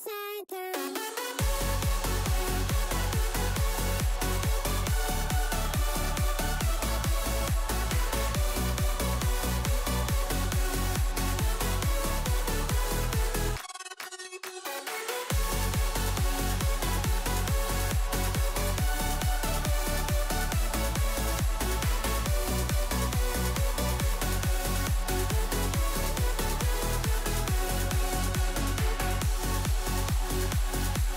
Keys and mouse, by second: 1.2 s, 3.6 middle click, 4.5 2, 5.1 click, 6.0 ctrl+r, 7.9 2, 8.4 middle click, 8.8 shift+click, 9.5 g, 11.5 click, 12.0 KP_1, 12.6 shift+click, 14.3 ctrl+b, 15.6 ctrl+z, 15.9 middle click, 17.1 2, 17.8 middle click, 18.4 Tab, 18.9 middle click, 19.3 Tab, 20.5 Tab, 20.5 middle click, 20.8 Tab, 21.0 middle click, 21.3 2, 22.1 click, 23.1-24.4 right drag, 24.5 3, 24.9 click, 25.4 KP_7, 26.4 e, 27.4 s, 29.0 middle click, 29.4 2, 30.9 KP_7.